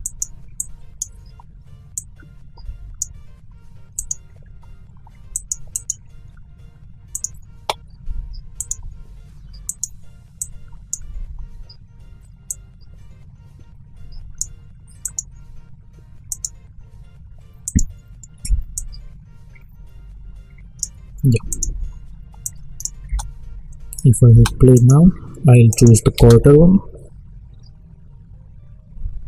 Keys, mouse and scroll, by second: 17.6-23.0 drag, 23.0 space, 24.7 click, 26.1 space.